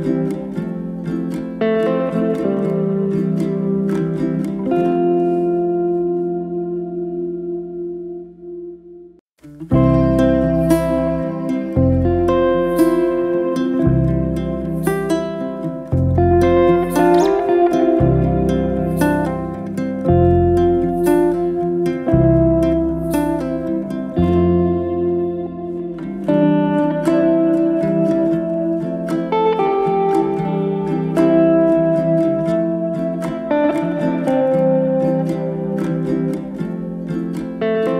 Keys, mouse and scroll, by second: 0.6 click, 1.1 click, 1.6-4.4 drag, 4.6-6.0 middle drag, 6.3-7.8 drag, 8.0-8.4 middle drag, 8.4 scroll up 1, 8.6 middle click, 9.5 g, 10.6 g, 11.5-13.0 middle drag, 14.5 g, 15.6 KP_1, 16.2-17.5 middle drag, 17.5 click, 17.7-18.4 scroll up 1, 18.4 g, 21.4 alt+d, 22.2 ctrl+z, 23.2-24.8 drag, 25.7 alt+d, 27.4 ctrl+z, 27.9 alt+d, 30.0 g, 32.2 g, 34.3-37.9 drag.